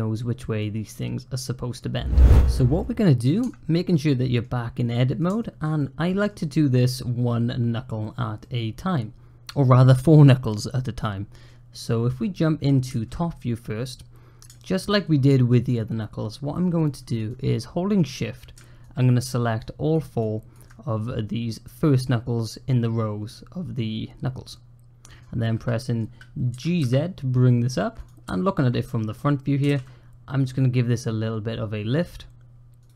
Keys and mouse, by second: 0.5 middle click, 0.7 click, 0.9 middle click, 3.2 Tab, 3.7 click, 4.7 click, 5.2 shift+click, 5.6 click, 6.4 middle click, 8.2-9.3 middle drag, 10.9 middle click, 11.7 middle click, 14.4 shift+middle click, 17.2-18.2 drag, 18.7 shift+click, 19.5 shift+click, 20.2 shift+click, 23.1-25.0 middle drag, 25.4 middle click, 26.4 g, 28.1 `, 29.5 g.